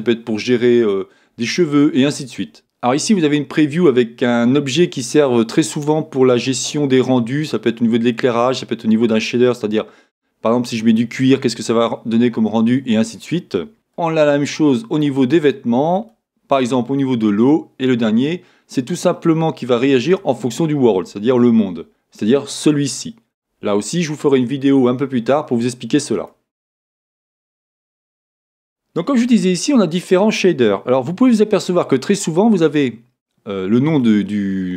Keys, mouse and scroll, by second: 2.6 click, 14.0 click, 16.0 click, 18.2 click, 20.0 click, 22.6 click, 33.0-34.7 drag.